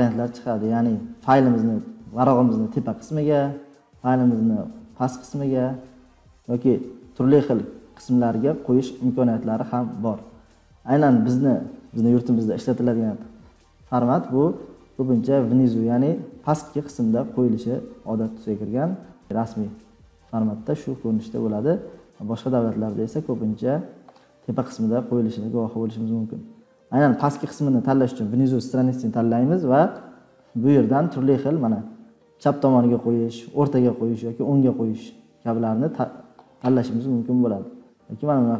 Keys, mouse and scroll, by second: 29.9 click, 37.0 scroll, 38.0 scroll, 38.1-38.5 scroll down 3.